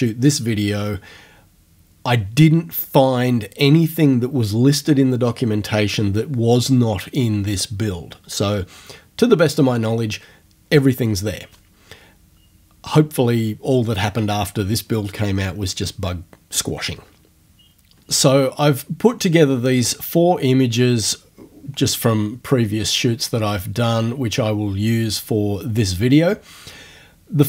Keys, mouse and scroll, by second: 22.1-22.7 ctrl+scroll up 4, 22.7 ctrl+scroll down 2, 22.9 ctrl+scroll up 2, 23.1-24.0 ctrl+scroll down 2, 24.0 ctrl+scroll up 2, 24.2-24.9 ctrl+scroll down 2, 24.9-26.1 scroll down 1.